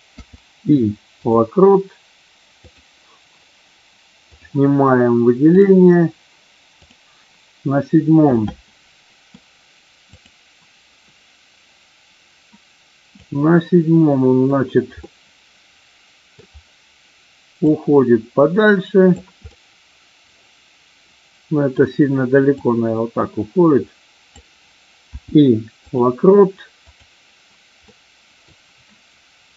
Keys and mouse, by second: 2.6 click, 6.7 click, 8.4-9.2 middle drag, 10.0 click, 13.1 click, 15.0-16.4 middle drag, 17.6-19.1 drag, 19.5-21.7 middle drag, 22.5-24.4 drag, 26.9 click, 27.9 middle click.